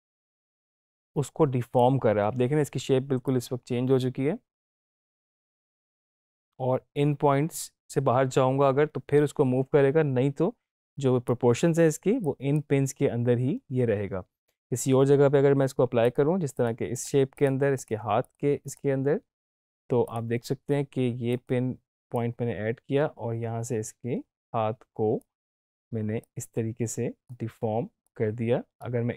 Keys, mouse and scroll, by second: 16.1-25.3 drag.